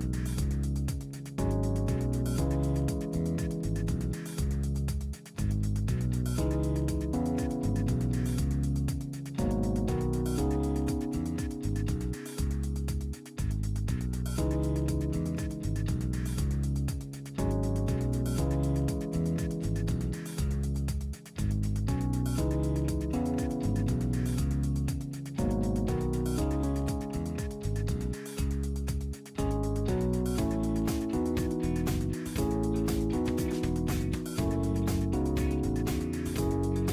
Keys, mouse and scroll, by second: 1.0 click, 2.4 click, 3.0 click, 4.7-7.3 middle drag, 8.8 scroll down 1, 9.4-11.0 middle drag, 12.5 click, 14.0 click, 15.5 click, 16.7 click, 17.8 click, 20.2 click, 22.8 click, 24.2 click, 27.4 click, 28.9 click, 31.0 click, 31.8 Escape, 32.5 Escape, 33.5 scroll up 2, 35.0 click, 36.2 click.